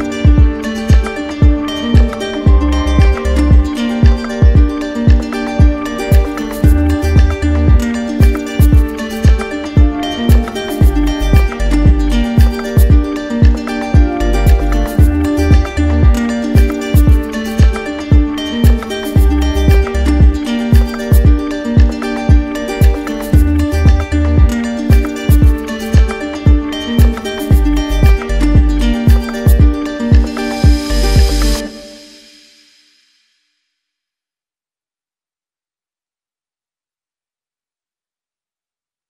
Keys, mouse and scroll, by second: 2.5-3.5 alt+drag, 4.2-5.2 drag, 6.5 click, 11.3 ctrl+click, 11.9 ctrl+click, 17.2 click, 17.8 ctrl+click, 19.8 click, 20.3 alt+click, 22.9 ctrl+click, 23.4 alt+click, 26.3 click, 27.6 ctrl+click, 28.5 ctrl+click, 29.0 ctrl+click, 31.9 click, 32.3 ctrl+click, 34.2 click, 34.8 click, 35.2 click, 36.3 click, 37.4 q, 38.4 right click.